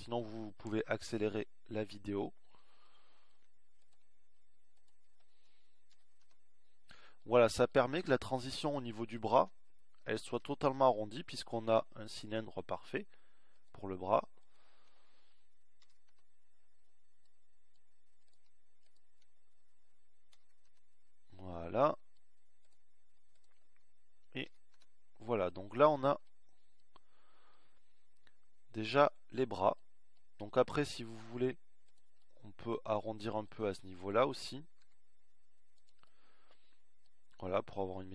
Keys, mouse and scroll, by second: 0.9 alt+m, 6.1 alt+m, 10.7 alt+m, 16.2 alt+m, 20.8 alt+m, 25.0 alt+m, 35.5 s.